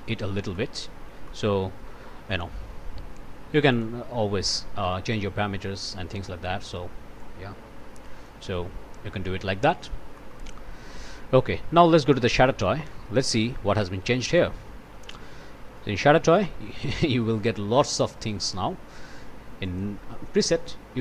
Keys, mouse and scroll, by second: 0.5-0.8 scroll up 1, 0.8 scroll down 1, 1.3-2.3 scroll up 1, 2.3-2.6 scroll up 1, 3.1 scroll up 2, 3.5 click, 7.2-8.5 drag, 9.6 click, 10.2 click, 10.8 click, 11.5 Delete, 11.8-12.6 scroll up 2, 12.5 Tab, 13.5 Down, 13.8 Return, 15.8-16.2 scroll up 1, 16.3 1, 17.8 scroll up 1, 19.6 click.